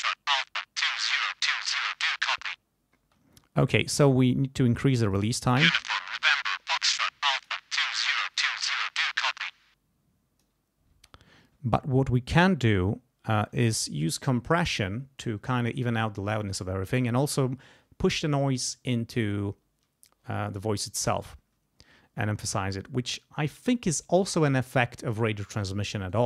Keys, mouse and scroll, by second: 3.0 space, 4.0-5.3 drag, 5.3 space, 6.8 click, 8.3 click, 9.4 click, 10.9 space, 13.3 click, 26.1 right click.